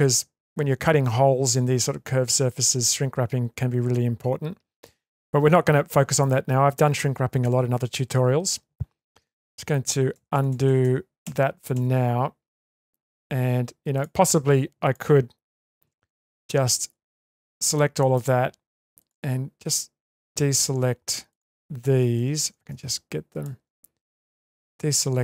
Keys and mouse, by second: 4.1 shift+middle click, 9.4 ctrl+z, 9.8 ctrl+z, 10.1 ctrl+z, 10.3 ctrl+z, 10.5 ctrl+z, 10.6 ctrl+z, 10.8 ctrl+z, 11.2 ctrl+z, 11.7 ctrl+z, 12.7 Tab, 15.9 2, 17.7 middle click, 20.4 ctrl+z, 21.3 click, 22.3 ctrl+z, 22.9 click, 24.3 click, 25.0 ctrl+click.